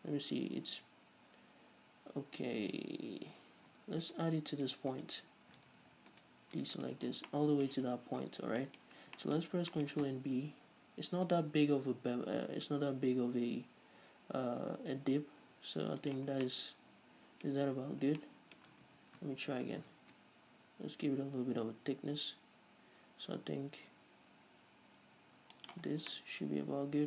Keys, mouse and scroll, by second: 2.6-4.3 scroll up 2, 4.3 shift+right click, 5.1 shift+right click, 5.9 ctrl+z, 6.3-7.5 shift+right drag, 7.5-27.0 middle drag, 8.4-8.8 scroll down 2, 9.0-9.9 scroll up 4, 10.9 ctrl+b, 16.3 shift+click, 16.5 scroll down 2, 17.7-18.4 scroll up 2, 19.1 ctrl+z, 20.0 ctrl+b, 25.9 shift+click, 26.1 scroll down 2.